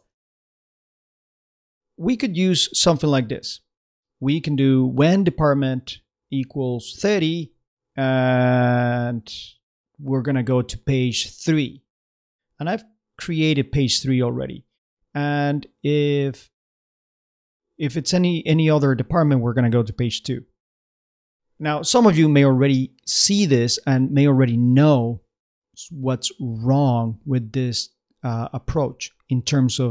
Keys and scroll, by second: 0.0 super+Tab.